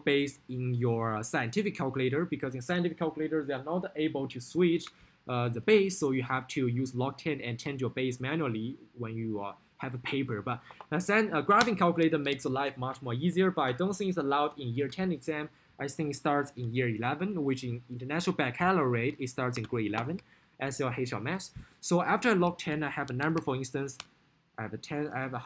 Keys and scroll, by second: 23.0-23.9 typing, 25.2 0.